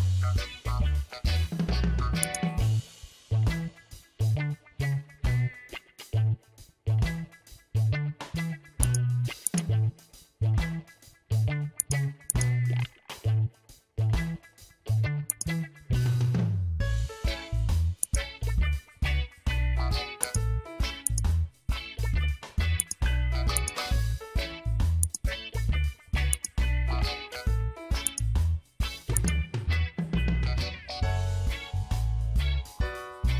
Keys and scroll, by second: 1.6 ctrl+j, 5.9 Return, 10.7 ctrl+g, 28.0 space.